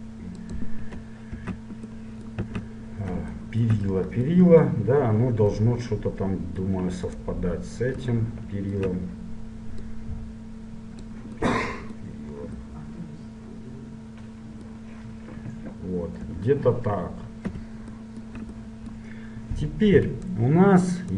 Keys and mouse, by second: 0.9-2.4 middle drag, 1.6 Tab, 2.6 z, 6.0-7.2 middle drag, 7.2-10.1 right drag, 10.1-11.8 drag, 11.8-18.2 middle drag, 16.4 KP_1, 18.2-20.2 drag, 20.2-21.1 right drag.